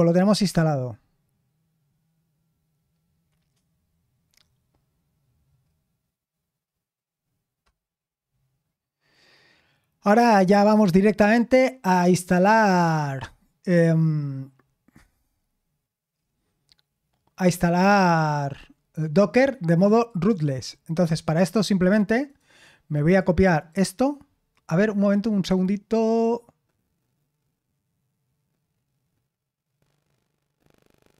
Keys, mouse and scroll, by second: 5.2-6.6 scroll down 2, 6.6-8.4 scroll down 1, 8.4-11.0 scroll down 1, 11.0-12.3 scroll down 1, 12.3 click, 16.1-20.0 scroll down 2, 20.0 click, 21.1-22.2 drag, 23.0 click, 23.5-26.0 right drag, 26.0 click.